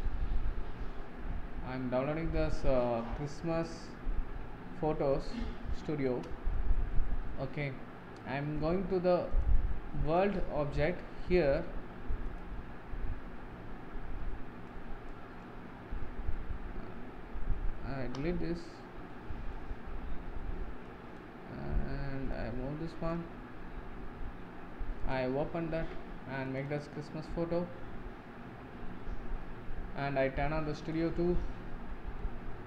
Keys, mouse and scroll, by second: 6.1 ctrl+space, 7.4 scroll down 2, 18.0 Delete, 22.4-25.2 drag, 25.2 click, 26.7 click, 29.3-30.9 middle drag, 30.9 click, 31.9 middle click, 32.5 scroll down 1.